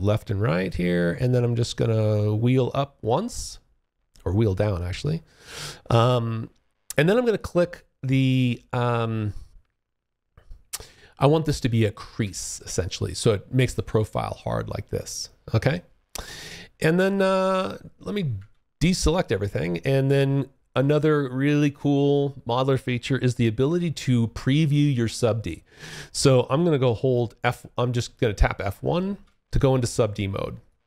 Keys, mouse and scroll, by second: 1.8-2.9 scroll down 3, 2.9 scroll up 2, 3.4-5.4 scroll down 1, 11.4 click, 16.7 click, 17.5 click, 28.2 F1, 29.8 alt+click.